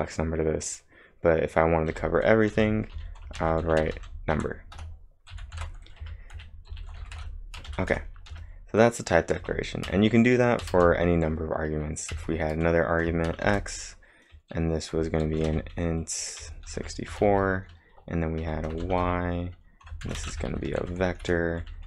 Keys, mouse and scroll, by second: 1.9 click, 2.3-7.7 typing, 9.2-12.1 typing, 13.3 shift+;, 13.5 shift+;, 15.0-21.8 typing.